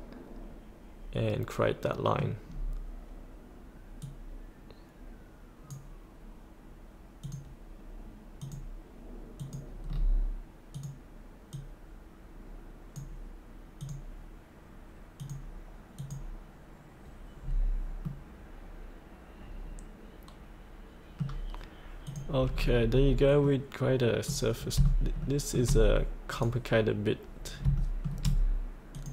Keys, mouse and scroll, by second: 2.5-4.0 scroll down 1, 4.0-6.5 drag, 9.8-10.7 scroll down 1, 10.7-13.7 drag, 17.4-17.8 scroll up 1, 18.0-21.8 middle drag, 22.0 click, 22.5 scroll up 1, 23.5 middle click, 24.5 scroll down 1, 25.2 shift+middle click, 26.3 click, 27.7 shift+middle click, 28.9 click.